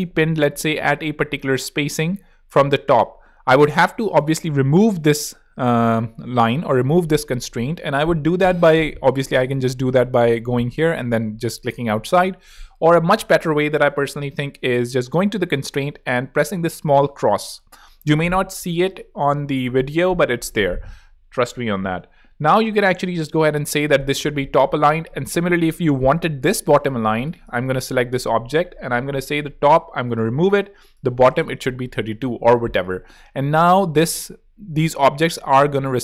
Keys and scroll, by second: 0.0-0.4 typing, 0.9 super+Return, 0.9 super+z, 13.8 super+z, 22.8-23.6 typing, 30.8-31.6 typing.